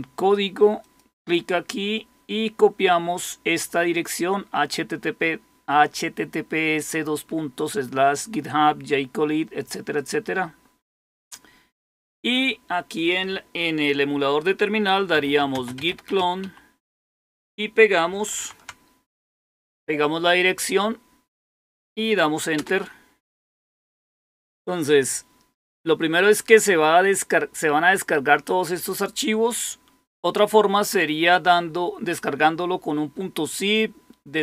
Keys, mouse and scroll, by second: 0.7 click, 9.9 click, 11.9 click, 12.3 click, 12.9 click, 14.8-16.8 typing, 18.3 ctrl+v, 19.5 Right, 30.7 click.